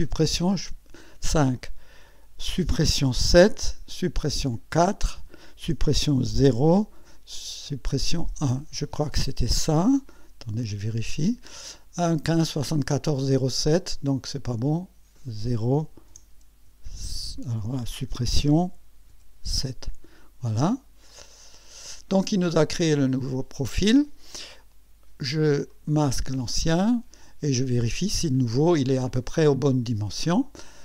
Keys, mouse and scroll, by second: 0.2 KP_5, 2.6 Delete, 3.4 KP_7, 4.1 Delete, 5.7 Delete, 6.5 KP_0, 7.5 Delete, 8.2 1, 10.6 click, 14.7 click, 16.1 BackSpace, 16.7 7, 18.6 Delete, 19.1 7, 21.1 click, 22.0 scroll down 2, 22.7-23.5 right drag, 25.7 click, 26.3 space, 26.9 scroll up 1, 27.5-28.1 right drag, 28.5 scroll up 1, 29.1-29.9 right drag.